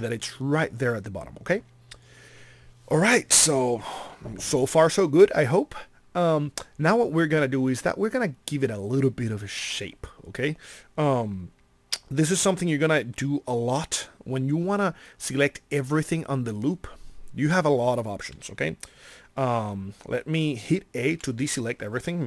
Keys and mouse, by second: 21.1 a.